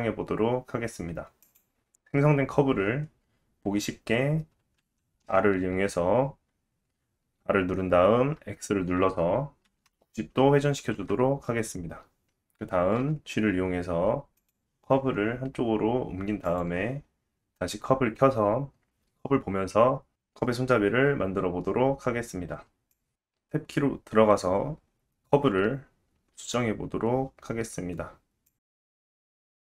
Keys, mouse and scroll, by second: 4.8 r, 10.9-13.0 middle drag, 13.0 g, 16.5 click, 23.2 click, 23.3 Tab, 23.7 r, 23.9 g, 24.8 middle click, 24.9-27.3 drag, 26.6-29.6 typing, 27.4 click, 28.2 click, 28.8 click.